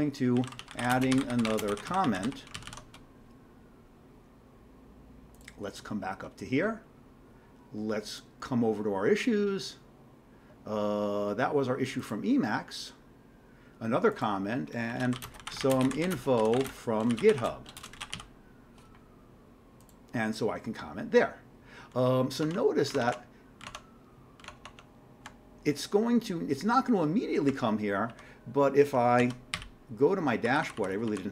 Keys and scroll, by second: 0.1-3.2 typing, 14.7-18.8 typing, 22.5 alt+Tab, 22.9 alt+Tab, 23.1 alt+Tab, 23.6 alt+Tab, 27.5-28.3 typing, 29.2 ctrl+x, 29.6 g, 30.4 Down, 30.6 Down, 30.8 Down, 30.9 Down.